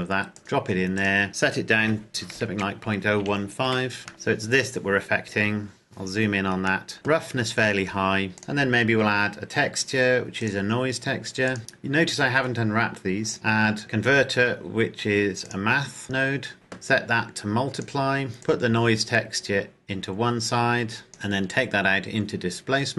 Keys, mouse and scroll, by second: 1.7 KP_Decimal, 2.3 KP_0, 2.8 KP_1, 3.2 KP_5, 3.9 KP_Enter, 4.1 shift+middle click, 5.5-6.9 scroll up 1, 6.9 shift+middle click, 8.5 click, 16.5 click.